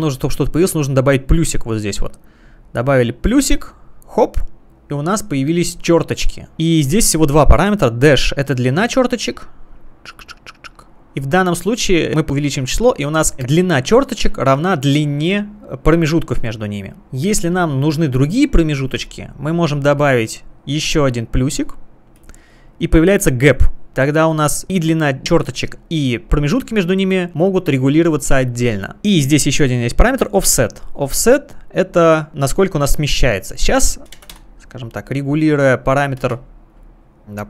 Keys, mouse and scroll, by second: 3.3 click, 8.9 click, 13.0 click, 22.2 click, 26.0 click, 29.0 click, 31.0 click, 34.5 Return, 34.5 typing, 36.2 space, 36.6 click, 36.9 click.